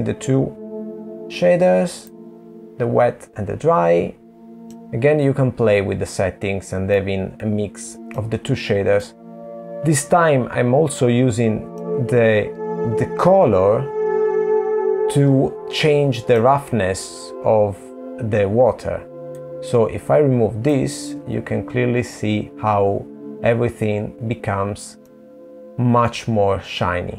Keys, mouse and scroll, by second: 4.7 middle click, 8.1 middle click, 11.7 click, 17.4 middle click, 26.1 click.